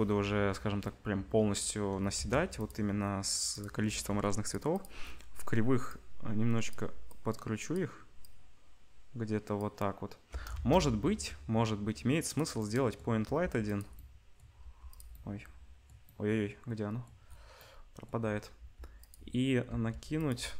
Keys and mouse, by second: 2.2 ctrl+s, 2.6 click, 3.5-4.6 drag, 4.7-13.8 drag, 10.5 shift+a, 13.2 g, 13.8-17.6 middle drag, 14.6 g, 18.5 g, 19.6 g.